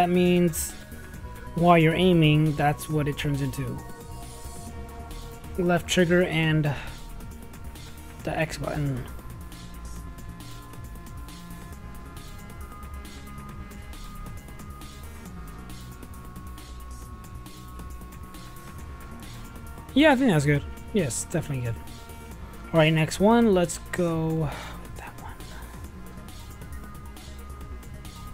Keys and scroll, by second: 5.5-6.4 typing, 7.7 shift+a, 8.2 shift+a, 8.5 r, 9.7 i, 10.9 m, 12.2 shift+Return, 12.3 shift+], 12.7 shift+-, 13.6 shift+0, 15.1-16.0 typing, 27.2 Tab.